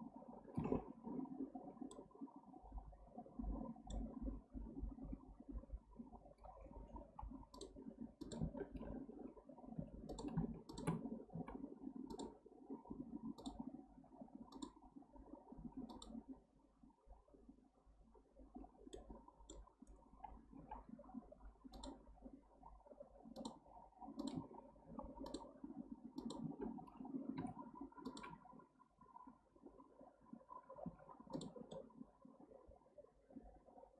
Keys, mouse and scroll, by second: 1.9-4.9 middle drag, 9.8 2, 10.1 click, 10.7 shift+click, 11.3 x, 13.4 click, 13.9 x, 15.9 click, 18.9-20.6 middle drag, 20.6 k, 27.4 2, 28.1 click, 30.8 x, 31.7-33.9 middle drag.